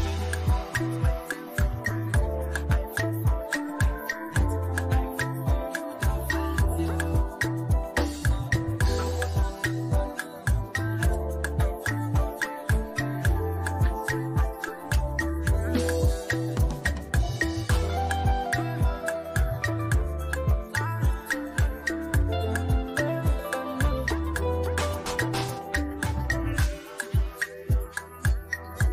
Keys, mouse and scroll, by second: 1.3 click, 2.1 v, 3.3 click, 5.0-7.0 typing, 8.3 click, 13.3 ctrl+t, 14.5-16.3 drag, 16.7 ctrl+a, 17.6 click, 19.5 ctrl+d, 20.5 shift+click, 24.4-28.9 drag.